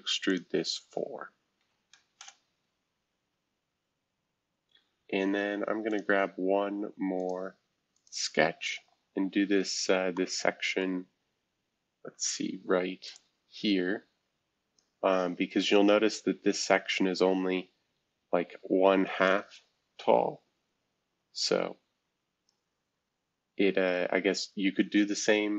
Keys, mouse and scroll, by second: 0.4-2.2 right drag, 2.2 Return, 5.9-9.6 drag, 10.8-12.3 middle drag, 13.1-16.3 drag, 17.2 shift+F2, 19.2-23.0 drag, 23.3 shift+F2, 23.9 F2.